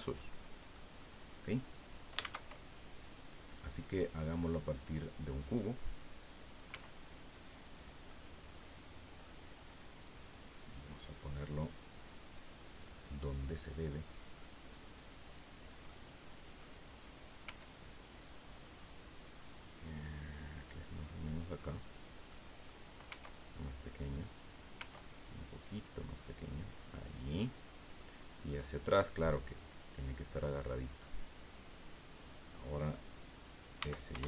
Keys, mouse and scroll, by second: 0.1 scroll up 2, 0.7 middle click, 1.3-1.6 scroll down 2, 2.2 shift+a, 5.4 click, 6.7 s, 7.6 click, 8.1-8.8 middle drag, 9.2-9.8 middle drag, 10.2-11.8 drag, 12.4-14.2 drag, 14.7-16.8 drag, 15.9-16.8 middle drag, 17.4 s, 19.5 click, 20.4-22.0 drag, 22.3 middle click, 23.0 s, 24.3 click, 24.7 s, 25.9 click, 26.7-28.2 drag, 28.6 middle click, 29.3-32.4 drag, 33.8 s, 34.1 y.